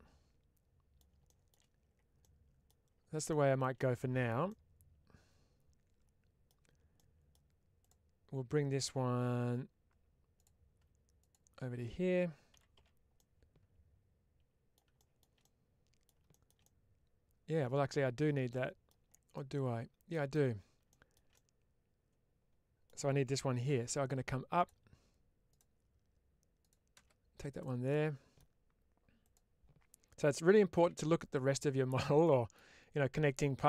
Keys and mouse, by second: 2.1 middle click, 3.1 shift+middle click, 4.3-6.3 middle drag, 6.8 middle click, 9.0 1, 13.0-14.6 middle drag, 15.3 middle click, 19.2 middle click, 27.4 click, 27.8 middle click, 29.1 click, 31.8 click, 32.1 middle click, 33.4 middle click.